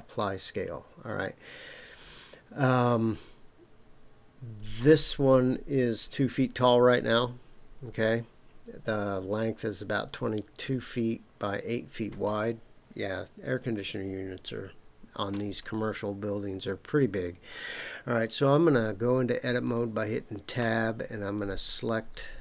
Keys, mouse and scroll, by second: 15.3 Tab, 17.1 click, 19.6 shift+click, 21.3 shift+click.